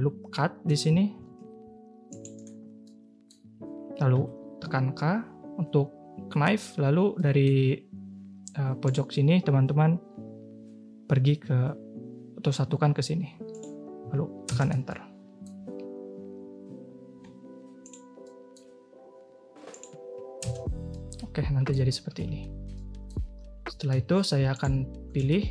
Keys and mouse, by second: 1.2 ctrl+r, 2.8 click, 4.1 k, 7.1-14.5 drag, 14.8 middle click, 17.2 k, 18.2-20.5 middle drag, 20.9 middle click, 22.1 a, 22.3 a, 22.7 middle drag, 23.9 2, 25.2 shift+middle click.